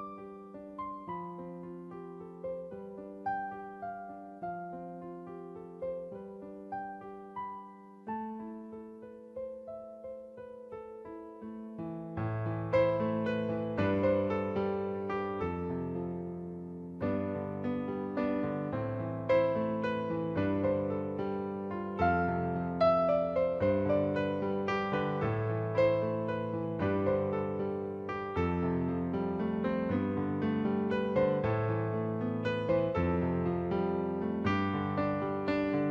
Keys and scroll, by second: 8.4 ctrl+t, 13.6 Return, 16.5 ctrl+t, 18.9 Return, 21.4 ctrl+z.